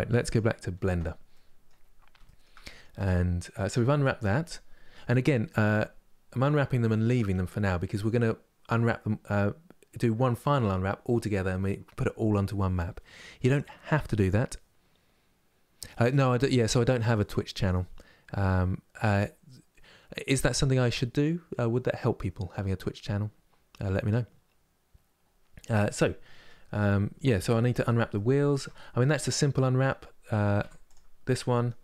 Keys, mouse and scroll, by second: 0.0-1.5 middle drag, 1.5-1.9 scroll down 1, 1.9-3.2 shift+middle drag, 3.2 KP_Divide, 3.5 middle click, 4.2 scroll down 2, 4.8-27.3 middle drag, 27.3 Tab, 27.5 click, 27.8 middle click, 28.2 Tab, 28.4 middle click, 28.9-29.3 scroll up 1, 29.3-30.3 middle drag, 30.3 3, 30.6 click, 30.9-31.8 middle drag.